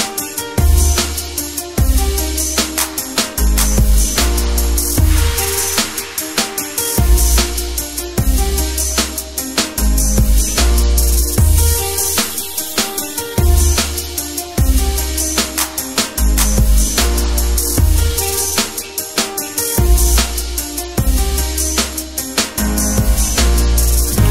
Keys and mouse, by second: 1.4 middle click, 2.4 ctrl+shift+click, 8.8-11.1 middle drag, 11.1-13.1 drag, 22.4 click, 23.0 click.